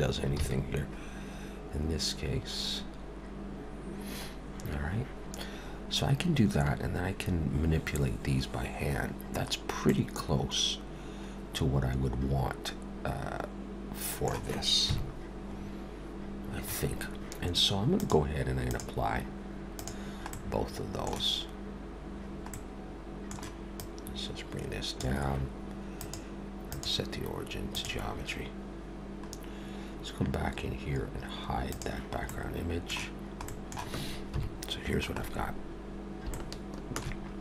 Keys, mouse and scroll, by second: 0.3 ctrl+z, 9.9 middle click, 14.9 KP_7, 15.6-16.3 scroll up 2, 16.3-16.9 scroll down 2, 18.0 click, 18.6 click, 19.8 click, 20.3 middle click, 22.5 middle click, 23.8 click, 26.0 click, 29.3-31.7 scroll down 1, 31.7 click, 32.3 middle click, 33.5 middle click, 34.3 KP_7, 35.2-36.3 scroll up 1, 36.3 shift+middle click.